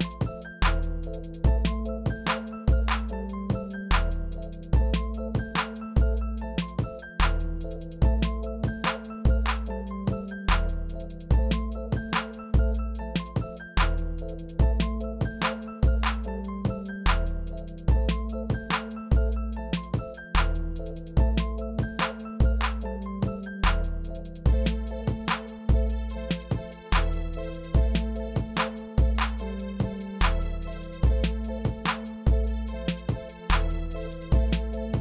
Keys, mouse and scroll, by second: 0.0 shift+middle click, 0.2 click, 0.6 middle click, 1.2 click, 1.6-2.3 middle drag, 2.3 click, 2.3 middle click, 2.7 click, 2.9-3.8 middle drag, 3.8 click, 4.1-4.6 middle drag, 4.6-17.9 typing, 4.9-5.2 middle drag, 5.5 middle drag, 6.0 middle drag, 6.2 shift+click, 6.5 middle drag, 6.8 drag, 6.8 middle drag, 7.4-8.3 middle drag, 8.7 middle drag, 9.2-9.6 middle drag, 10.3 middle drag, 10.9 middle drag, 11.3 middle click, 11.8 middle click, 12.1 middle drag, 12.7 middle drag, 13.4 middle click, 13.9-14.3 middle drag, 14.3 shift+click, 14.3 middle click, 14.7 middle drag, 14.9 click, 15.4 middle click, 15.9-16.4 middle drag, 16.7 middle click, 17.8 middle click, 18.3-19.3 shift+middle drag, 19.3 e, 19.6-20.2 middle drag, 20.5 click, 20.9 middle click, 21.3 shift+middle click, 21.6 click, 21.7 g, 21.9 middle click, 22.3 shift+click, 22.6 s, 23.2 middle click, 23.9 click, 24.3 s, 24.9 middle click, 25.4 shift+click, 25.8 s, 26.4 middle click, 27.7 middle click, 28.0 click, 28.0 middle click, 28.2 g, 28.5 middle click, 29.0 click, 29.1 g, 29.3 middle click, 29.8 click, 29.9 middle click, 30.1 g, 30.4-31.4 middle drag, 31.4 click, 31.6 g, 31.9 middle click, 32.7 click, 32.7 g, 33.0 click, 33.0 middle click, 33.4 g, 33.6-34.0 middle drag, 34.0 click, 34.2 g, 34.5 middle drag, 34.7 click.